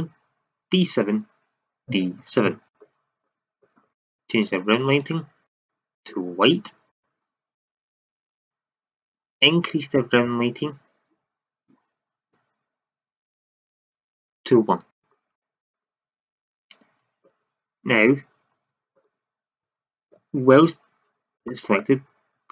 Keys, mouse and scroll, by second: 3.9-6.0 drag, 6.0 middle click, 9.6-11.7 drag, 16.5-18.1 drag, 18.1 Tab, 18.5 shift+z, 19.6 Tab, 20.5 KP_1.